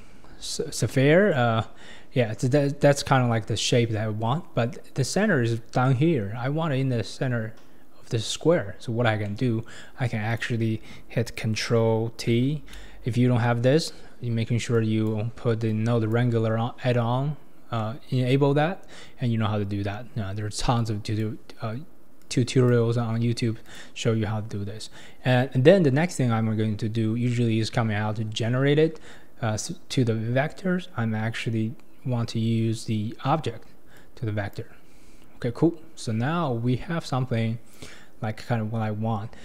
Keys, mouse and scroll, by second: 1.2-4.4 scroll down 6, 8.8-9.2 scroll down 1, 9.2-10.3 middle drag, 10.3 click, 12.3 ctrl+t, 13.4-14.8 middle drag, 14.8 click, 15.7 click, 17.7 scroll down 1, 17.8-18.7 middle drag, 18.7-20.5 scroll up 3, 20.8-23.8 drag, 24.3-25.5 scroll down 2, 25.9-29.0 scroll up 2, 34.0-35.8 drag, 35.8-39.0 scroll up 2.